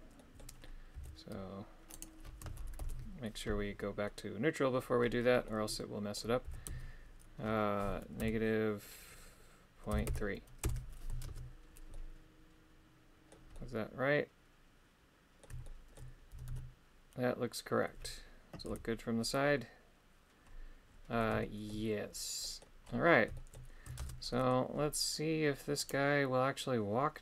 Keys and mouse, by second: 0.1 middle click, 1.9-4.0 right drag, 4.0 middle click, 5.4 middle click, 11.9-13.3 middle drag, 11.9 shift+space, 13.6-15.4 middle drag, 15.6 shift+middle click, 21.4 shift+middle click, 22.4 middle click, 23.3 shift+middle click, 24.3 middle click, 25.8 right click.